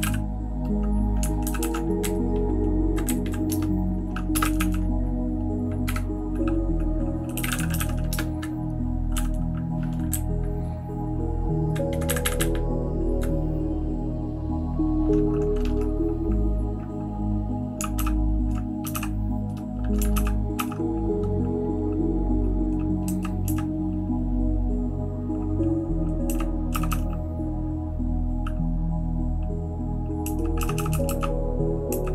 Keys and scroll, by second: 0.0 alt+., 1.4 ctrl+w, 1.6 ctrl+w, 2.0 Down, 2.2-2.8 Down, 3.2 Down, 3.6 Return, 4.3 typing, 7.1-11.8 typing, 10.1-11.7 Down, 12.1 Up, 12.2 Up, 12.4-13.1 Up, 18.9 ctrl+8, 18.9 *, 20.1 }, 20.5 }, 23.1 {, 23.4 {, 26.2-26.9 typing, 30.2-32.1 typing.